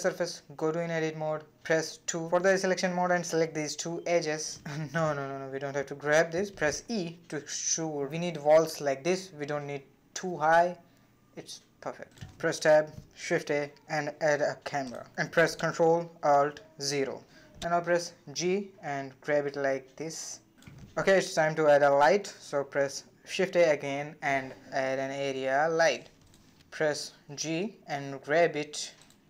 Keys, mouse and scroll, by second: 0.1 Tab, 0.9-1.9 shift+middle drag, 1.9 2, 2.3 click, 2.9 shift+click, 3.7 g, 6.0 e, 8.9-9.3 scroll up 1, 9.3-10.6 shift+middle drag, 10.6-11.0 scroll up 1, 11.0 shift+middle click, 12.0 Tab, 12.6 shift+a, 15.0 shift+a, 16.1 ctrl+alt+KP_0, 18.1 g, 23.8 shift+a, 27.5 g.